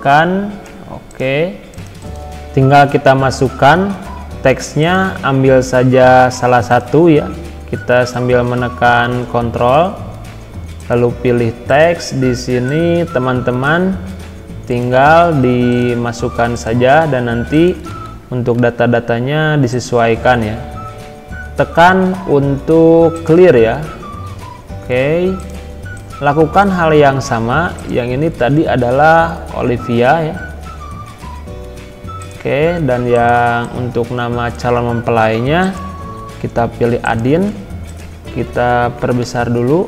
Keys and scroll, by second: 17.9 ctrl+a, 18.6 ctrl+v, 20.1 ctrl+a, 38.3 ctrl+a, 39.3 ctrl+].